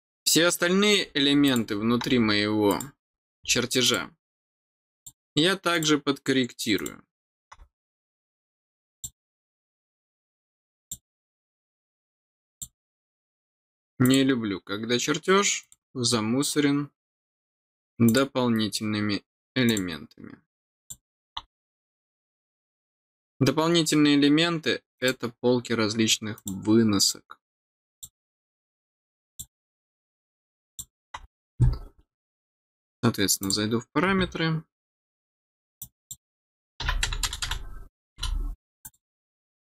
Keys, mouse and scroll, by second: 1.4 click, 2.6 click, 3.8 click, 4.9 click, 5.7 click, 6.7 click, 8.9 click, 10.8 click, 12.5 click, 14.0 click, 15.6 click, 18.0 click, 19.6 click, 20.7 click, 24.9 click, 26.3 click, 27.9 click, 29.2 click, 30.6 click, 33.4 click, 35.7 click, 38.8 click.